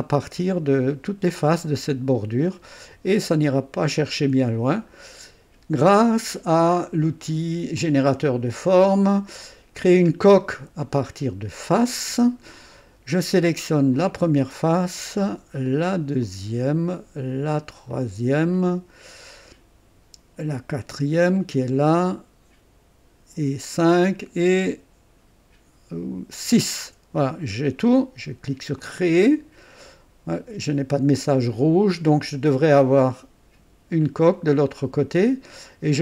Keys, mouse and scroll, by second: 3.4 click, 4.2 right click, 4.9-5.3 scroll down 1, 7.7 click, 11.7 click, 13.9 click, 16.2 ctrl+click, 17.9 ctrl+click, 18.7 ctrl+click, 21.4 ctrl+click, 23.6 ctrl+click, 26.3 ctrl+click, 28.8 click.